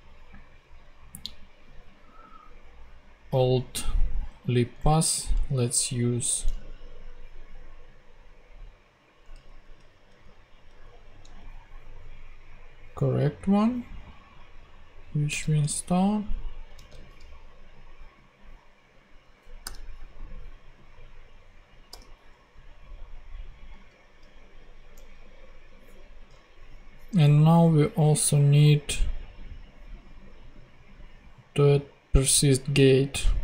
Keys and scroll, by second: 4.8 super+Tab, 9.4 Up, 15.5 super+Tab, 16.7 super+v, 19.6 ;, 21.9 ;.